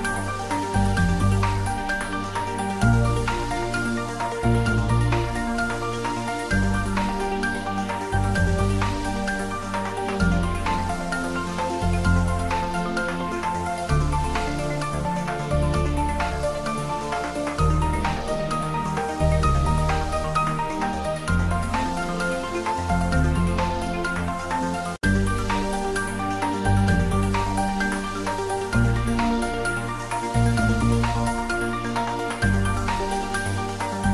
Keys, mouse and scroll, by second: 0.0-2.1 typing, 1.4 click, 2.6 scroll down 1, 3.3 s, 4.2 click, 4.6 g, 4.9 y, 7.0 click, 8.7 g, 9.1 y, 11.7 click, 12.0 g, 12.2 z, 13.8 z, 13.9 click, 14.1 s, 16.4 click, 16.7 scroll down 1, 17.9 click, 19.2 3, 19.6-20.2 scroll down 1, 20.9 g, 21.2 x, 24.1 click, 24.4 scroll down 1, 24.9-26.1 middle drag, 26.1 click, 27.4 scroll down 1, 28.4 shift+d, 28.5 y, 31.5 Right, 32.4 click.